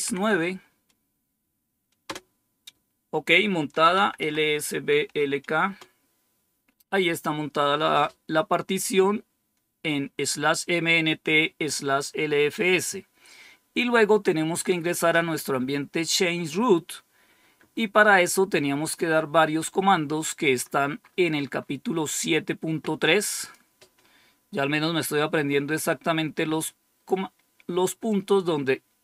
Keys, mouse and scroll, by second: 1.9 Return, 3.5-4.9 typing, 5.5 Return, 21.0-23.3 scroll up 1, 23.3 click, 25.5-26.9 scroll down 2, 28.0-29.0 drag.